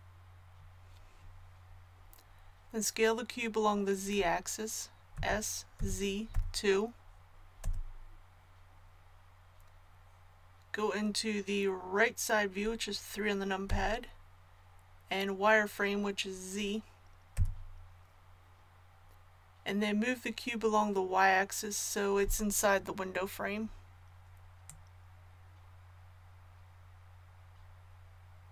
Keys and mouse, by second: 5.1 s, 13.6 KP_3, 17.3 z, 24.6-28.5 drag.